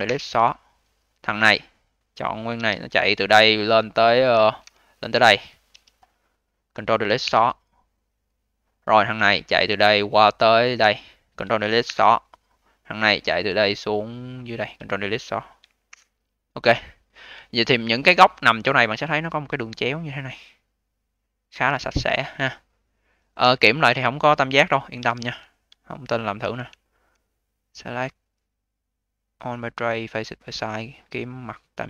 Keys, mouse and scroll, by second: 1.1 click, 1.3 click, 2.4 d, 2.7-3.3 scroll down 2, 3.3 alt+click, 3.7-4.8 scroll down 10, 4.8-5.6 scroll up 1, 5.6 d, 5.7-7.1 scroll up 9, 7.1 ctrl+Delete, 8.8 click, 9.0 click, 9.4-10.0 scroll down 9, 10.0 alt+click, 10.6-11.8 scroll up 9, 11.8 ctrl+Delete, 12.3-13.0 scroll down 1, 13.0 click, 13.1 click, 13.5-13.8 scroll down 3, 13.8-14.3 alt+middle drag, 14.3 alt+click, 15.8 ctrl+Delete, 16.6-17.3 scroll up 4, 17.3-18.6 alt+drag, 18.6-19.2 scroll up 5, 19.2 click, 22.4-23.4 scroll down 7, 23.4 click, 23.7-24.4 scroll down 5, 24.4 drag, 24.8 d, 25.4 scroll down 2, 25.7-26.7 alt+drag, 26.7 alt+middle click, 27.6-31.2 drag, 31.7-31.8 drag.